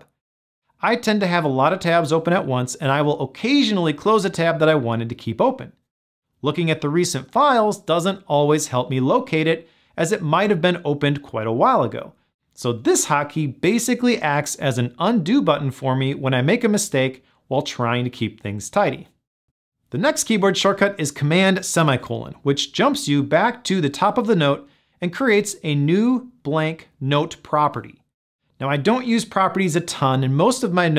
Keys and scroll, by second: 15.9 shift+super+t.